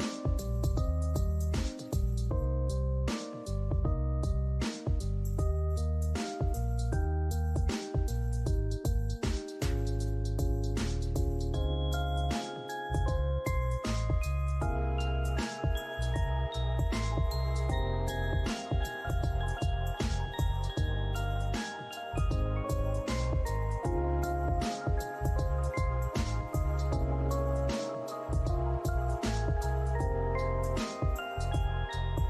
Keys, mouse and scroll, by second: 0.0 alt+click, 0.8 right click, 2.2 scroll up 1, 2.6 alt+click, 3.5 double click, 4.9 alt+middle click, 5.2 alt+click, 6.0 ctrl+z, 8.7 alt+click, 9.5 alt+middle click, 9.9 alt+click, 11.4 ctrl+z, 15.5 alt+click, 15.9 alt+right click, 18.1 double click, 18.7 alt+click, 20.2 double click, 21.8 scroll down 1, 22.1 alt+click, 22.6 alt+scroll down 2, 22.7 scroll up 1, 23.1 alt+click, 23.6 scroll down 1, 24.7 alt+middle click, 25.1 alt+click, 27.9 alt+middle click, 29.0 double click, 31.4 scroll down 1, 32.0 alt+middle click.